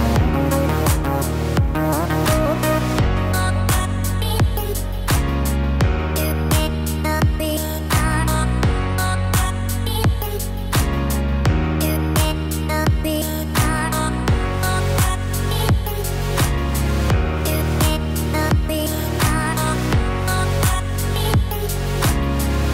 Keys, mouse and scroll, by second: 2.6 click, 5.0 click, 17.3-18.2 scroll up 1, 18.3 shift+middle click.